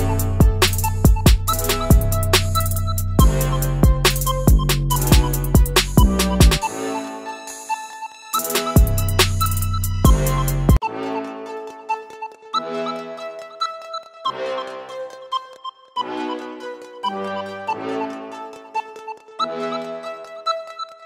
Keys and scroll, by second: 5.5 typing, 14.7 typing, 15.1 Return, 16.9-17.7 typing, 17.7 Return.